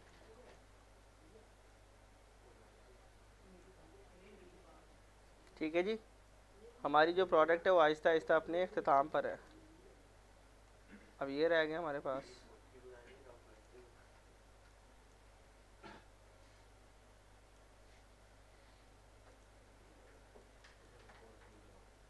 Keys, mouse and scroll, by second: 0.0 middle click, 0.3 click, 3.8 scroll down 1, 4.5 middle click, 5.4 middle click, 5.8 alt+scroll up 1, 6.3 middle click, 7.0 scroll down 1, 7.2 z, 7.6-7.9 scroll down 1, 7.9 z, 8.2-8.9 scroll down 1, 9.2 a, 9.5 z, 9.9 scroll down 1, 10.3 middle click, 10.9 scroll up 1, 11.4 scroll down 1, 12.3 scroll up 1, 13.0 click, 14.2 scroll up 1, 14.7 click, 15.5 scroll up 1, 15.9 click, 19.9 scroll up 1, 20.2 middle click, 20.6 click.